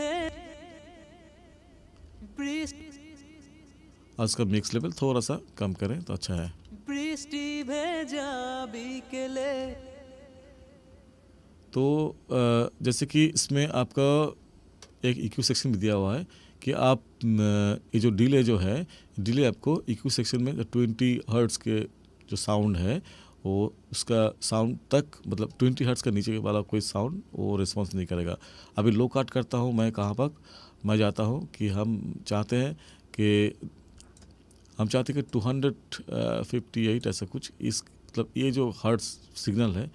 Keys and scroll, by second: 0.2 space, 2.0 space, 6.5 space, 9.6 space.